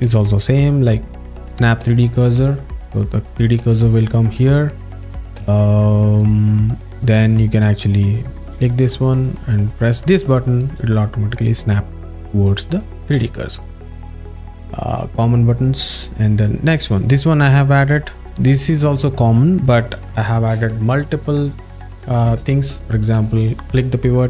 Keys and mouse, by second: 2.5 click, 4.0 click, 6.2 click, 7.4 click, 10.6 click, 13.2 z.